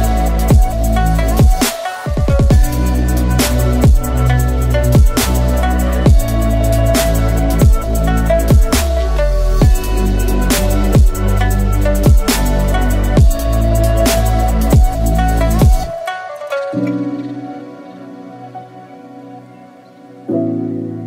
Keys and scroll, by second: 1.9 F2, 11.5 Tab, 20.2 Tab.